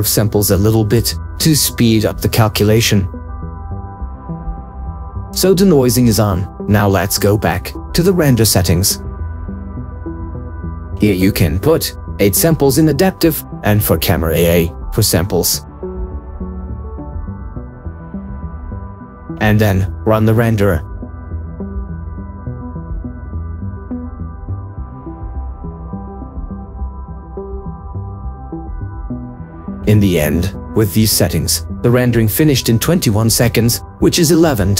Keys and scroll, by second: 14.4 ctrl+4, 15.3 8, 15.6 Return, 17.5 4, 18.0 Return, 23.2 ctrl+4, 31.8 ctrl+4.